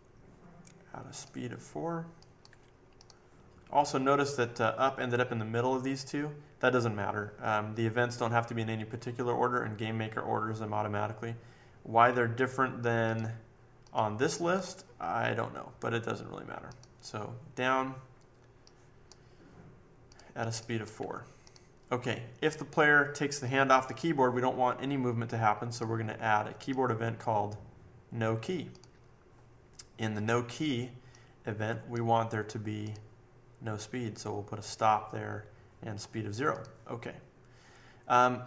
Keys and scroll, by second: 2.5 4, 20.9 4, 23.7 typing.